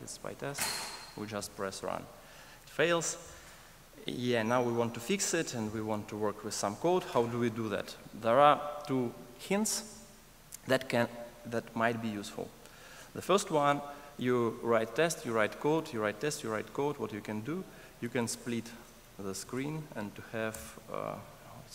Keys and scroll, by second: 0.2 ctrl+shift+r, 18.7 ctrl+shift+super+a.